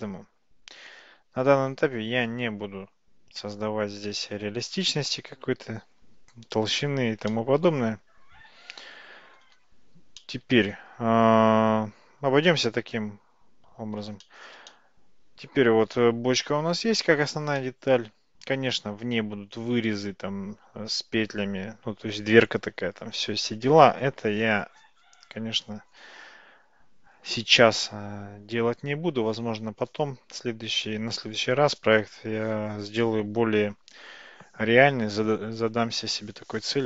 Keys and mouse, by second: 7.4-9.4 middle drag, 10.2-10.8 shift+middle drag, 14.3 shift+middle click, 14.8-17.3 middle drag, 17.6-18.0 middle drag.